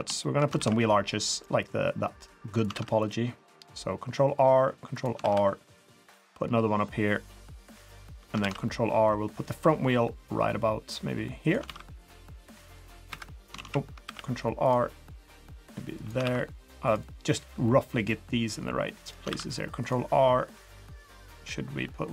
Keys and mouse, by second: 0.2 shift+click, 0.6 ctrl+r, 2.7 ctrl+r, 5.3 ctrl+r, 8.4 ctrl+r, 11.6 ctrl+r, 12.9 click, 13.6 ctrl+z, 14.0 ctrl+r, 16.2 ctrl+r, 19.3 ctrl+r.